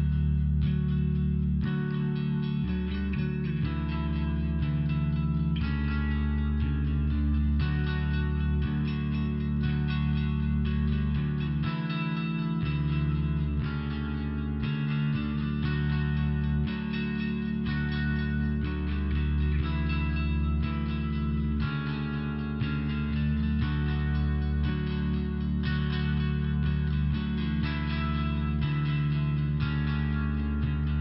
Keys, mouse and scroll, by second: 0.4 click, 0.5 click, 1.6 click, 2.9 click, 3.0 click, 6.3 click, 6.5 click, 6.6 click, 9.2 click, 9.3 click, 9.8 click, 12.6 click, 14.0 click, 15.4 click, 15.5 click, 17.4 click, 17.5 click, 17.6-19.6 typing, 18.1 click, 18.4 click, 20.0 Return, 21.2 click, 21.4 click, 24.1 click, 24.3 click, 24.4 click, 25.3 click, 26.7 click, 26.9 click, 27.9 click, 29.0 click, 29.2 click, 29.5 click, 29.7 click, 30.1 click, 30.2 click, 30.7 click, 30.8 click.